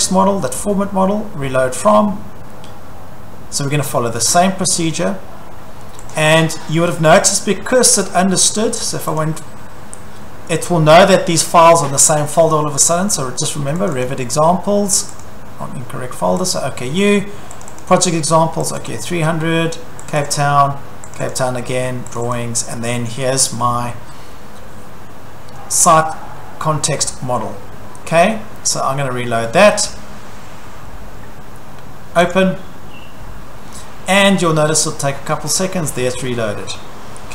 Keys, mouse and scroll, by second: 1.9 click, 9.2 click, 13.9 click, 14.0 click, 15.2 click, 16.5 click, 17.6 click, 17.8 click, 18.7 click, 18.9 click, 20.1 click, 20.2 click, 21.2 click, 21.3 click, 22.2 click, 22.3 click, 25.9 click, 28.4 click, 32.3 click.